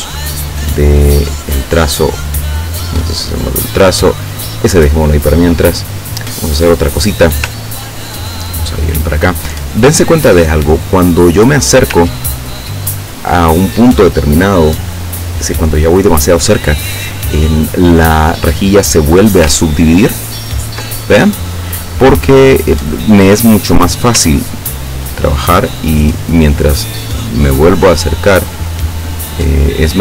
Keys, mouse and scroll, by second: 0.2 click, 1.2 click, 2.3 click, 3.4 click, 5.6 click, 6.7 click, 7.8 ctrl+scroll up 2, 8.4 ctrl+click, 9.9-10.3 ctrl+scroll down 2, 12.5 ctrl+scroll up 2, 20.3 ctrl+scroll up 2, 24.6 ctrl+scroll up 2, 25.2 ctrl+scroll up 2, 26.0 ctrl+scroll up 2, 27.4-28.8 ctrl+scroll up 6, 29.0-30.0 ctrl+scroll down 2.